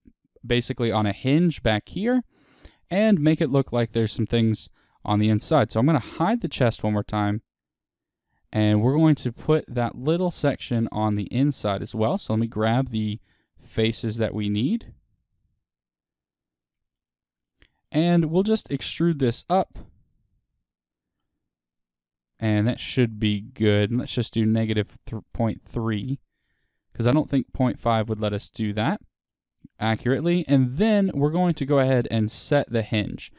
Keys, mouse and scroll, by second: 1.4 middle click, 4.4 click, 6.3 h, 8.4 click, 8.6 middle click, 9.4 Tab, 9.8-10.1 scroll up 2, 10.1 shift+middle click, 10.6-11.3 scroll up 1, 11.3-11.9 scroll down 1, 12.0 click, 13.1 shift+click, 13.7-17.0 drag, 17.0-19.1 middle drag, 19.1 e, 21.0 click, 21.2-26.0 middle drag, 26.0 click, 26.9-31.0 middle drag, 28.4-28.8 scroll, 30.3 scroll, 31.0 scroll, 31.8 middle click, 32.4 scroll.